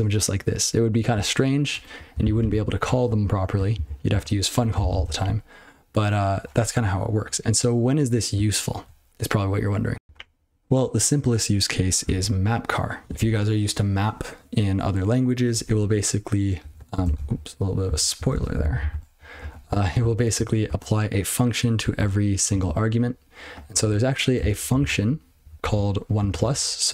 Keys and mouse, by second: 1.7 ctrl+BackSpace, 2.4 ctrl+c, 3.7 ctrl+/, 4.1 ctrl+/, 4.9 ctrl+c, 10.0 ctrl+l, 16.6 click, 16.7 click, 16.9 ctrl+a, 17.0 ctrl+space, 17.1 ctrl+p, 17.8 ctrl+g, 18.1 ctrl+p, 18.3 ctrl+n, 18.6 ctrl+n, 18.7 ctrl+n, 18.9 ctrl+w, 19.2 ctrl+p, 19.3 ctrl+p, 19.6 ctrl+f, 19.8-20.3 ctrl+f, 20.6 ctrl+f, 21.8 ctrl+f, 22.5 ctrl+f, 23.6 ctrl+b, 23.7 ctrl+b, 24.3 ctrl+space, 24.6 ctrl+f, 24.7 ctrl+f, 25.6 ctrl+g, 26.5 ctrl+shift+o.